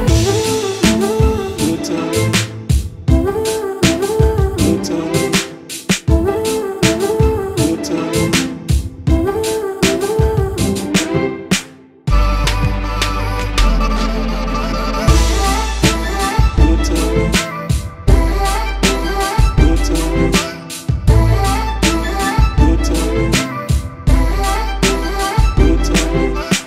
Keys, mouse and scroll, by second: 0.8 click, 1.6 s, 3.3 click, 4.2-5.5 drag, 5.7 click, 6.5 click, 7.5 click, 8.2 s, 15.7-17.4 drag, 17.6 click, 18.7-19.8 drag, 20.1 click, 20.8 click, 21.2-22.4 alt+drag, 22.5 Tab, 23.3 click, 23.5-25.0 alt+drag, 25.1 Tab, 25.6 alt+click, 26.2 click.